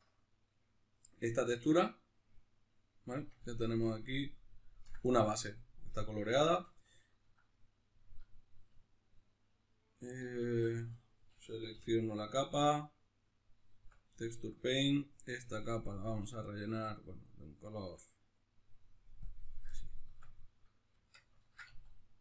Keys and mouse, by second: 10.6 Tab, 10.9 right click, 11.7 l, 12.1-17.6 middle drag, 13.9 Tab, 17.6 click, 19.3 click, 19.8-22.2 middle drag, 20.2 Tab, 21.7 a.